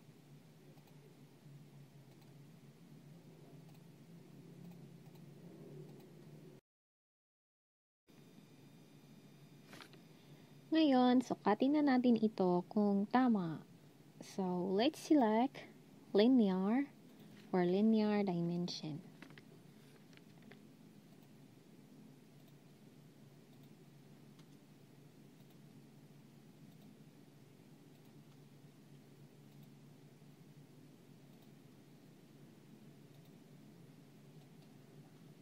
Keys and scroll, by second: 16.4 typing.